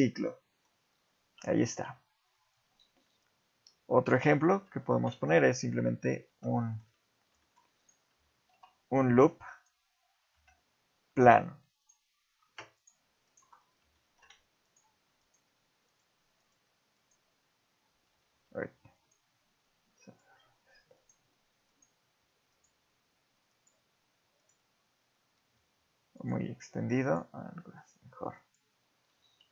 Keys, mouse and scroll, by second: 0.2 middle click, 1.7 ctrl+z, 2.2-3.5 scroll down 1, 3.5 scroll down 1, 4.1 KP_7, 5.6 scroll down 3, 6.1 Tab, 6.6 shift+middle click, 7.6 shift+middle click, 7.8 right click, 8.5 shift+a, 10.3 Tab, 11.2 click, 11.8 ctrl+right click, 12.8 ctrl+right click, 13.3 ctrl+right click, 13.6 scroll down 3, 13.9 shift+middle click, 14.6 ctrl+right click, 15.2 ctrl+right click, 15.9 ctrl+right click, 16.4 ctrl+right click, 17.0 ctrl+right click, 18.3 ctrl+z, 19.0 ctrl+right click, 20.0 ctrl+right click, 20.9 ctrl+right click, 21.8 ctrl+right click, 22.5 ctrl+right click, 23.5 ctrl+right click, 24.4 ctrl+right click, 25.5 ctrl+z, 26.2 ctrl+right click, 27.0 ctrl+right click, 27.9 ctrl+right click, 28.4 ctrl+right click, 29.2 ctrl+z.